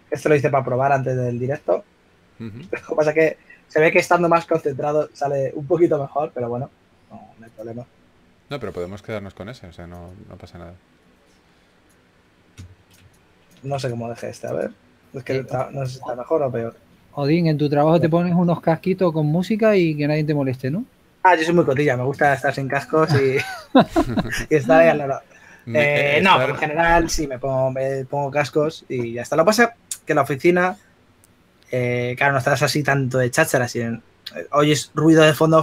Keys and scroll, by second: 0.0-0.9 typing, 18.0 s.